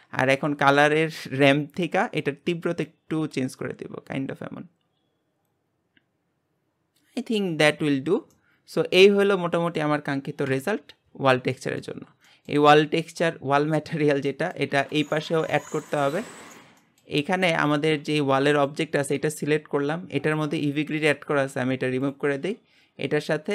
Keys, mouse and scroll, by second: 1.0-6.2 drag, 8.0-8.3 scroll down 3, 8.3-10.4 middle drag, 10.4 KP_Divide, 11.5-12.0 middle drag, 12.0 scroll down 3, 12.3-14.9 shift+middle drag, 14.9 click, 15.2 g, 16.8 shift+middle click, 17.2-17.7 scroll up 2, 17.7 click, 18.0 g, 20.7-22.1 scroll up 7, 22.1-23.5 drag.